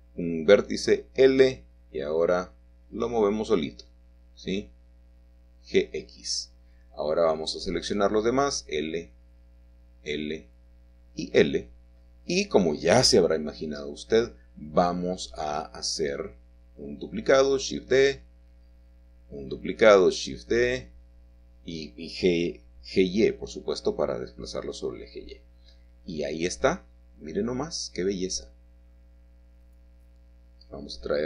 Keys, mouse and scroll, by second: 0.0 click, 1.0 click, 1.8 click, 2.6 l, 3.9 g, 6.8-7.9 drag, 8.7 typing, 11.1 typing, 12.5 typing, 13.0 middle click, 14.5 shift+middle click, 15.0-16.0 shift+scroll down 2, 15.0-16.0 typing, 18.3 click, 18.8 shift+middle click, 19.8-20.5 shift+scroll up 2, 20.5 typing, 22.9 click, 23.5-24.6 scroll down 1, 26.0-28.0 middle drag, 26.5-26.8 scroll up 1, 30.7 alt+h.